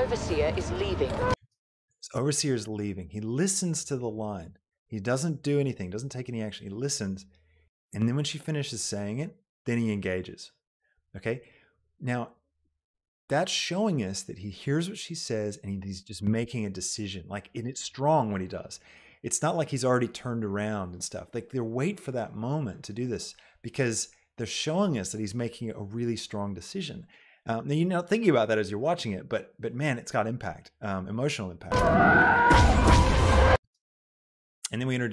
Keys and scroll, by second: 1.5 space, 31.6 space.